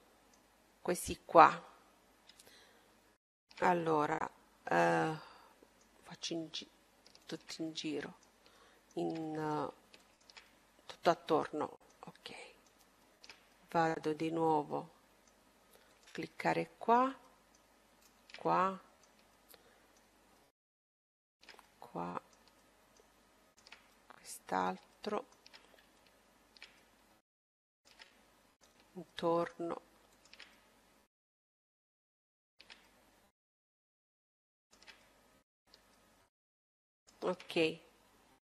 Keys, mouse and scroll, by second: 5.0-31.2 middle drag, 7.0-9.0 right drag, 9.9-11.1 right drag, 11.1 click, 15.6-17.5 right drag, 17.8-19.5 right drag, 21.2-23.0 right drag, 23.4-25.2 right drag, 27.6-29.6 right drag, 30.0-31.2 right drag, 34.6-36.4 right drag, 36.5-37.6 middle drag, 37.4-38.5 right drag.